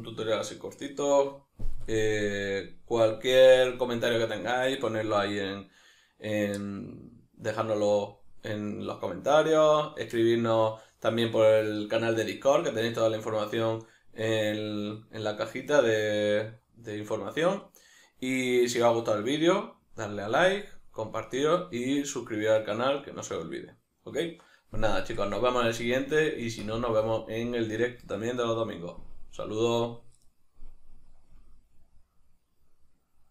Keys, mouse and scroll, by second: 31.8-33.1 middle drag.